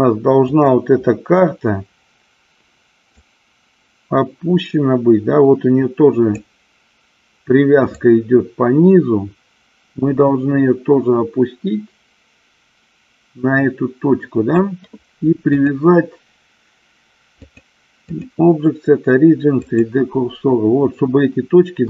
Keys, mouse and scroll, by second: 0.7 click, 3.6-6.6 drag, 8.3-14.8 drag, 15.8-17.8 drag, 18.4-20.1 drag.